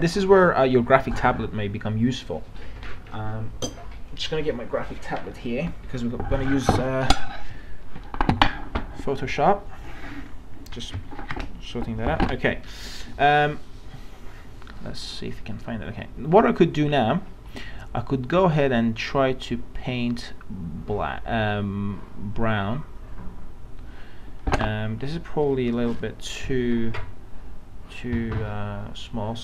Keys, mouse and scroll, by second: 3.8-24.3 drag, 25.7 ctrl+z, 28.6-29.4 drag.